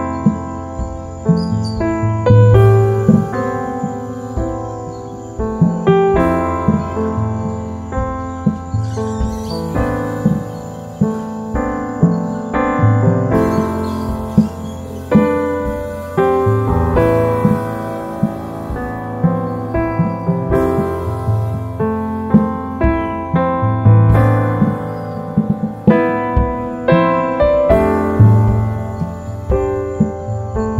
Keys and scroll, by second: 3.0 s, 16.8 super+z, 21.1 super++, 21.2 super+space, 21.8 super+z, 25.2 i, 26.7 super+c, 27.0 v, 28.7 alt+s.